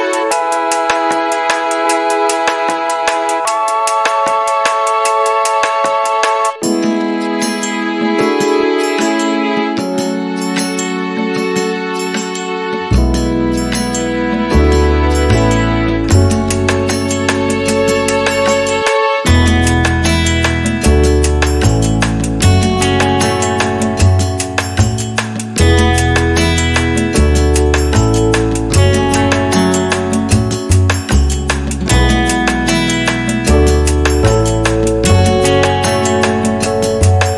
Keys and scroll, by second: 2.5 r, 5.6 space, 8.0 p, 8.9 5, 9.2 0, 9.6 Return, 11.5 space, 13.3 m, 18.8 3, 19.6 Return, 20.1 space, 21.4 p, 23.4 space, 24.2 e, 25.7 space, 27.7 Delete, 30.8 Delete, 32.6 Delete, 34.2 r, 36.7 space.